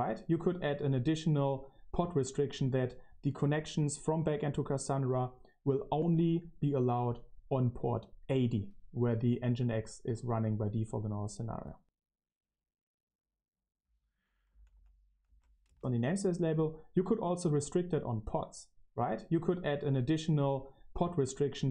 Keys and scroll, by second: 14.5-15.6 typing, 15.6 Left.